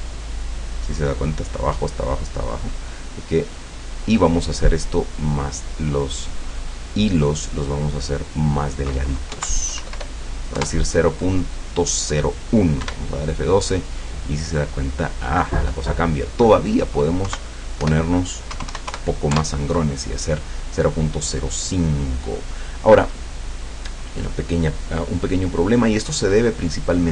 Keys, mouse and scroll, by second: 3.6 click, 6.3-8.3 drag, 9.4 Right, 9.8 BackSpace, 12.9 F12, 16.2 click, 17.3 Right, 17.9 BackSpace, 18.6 KP_0, 18.8 KP_5, 19.0 KP_Enter, 19.4 F12.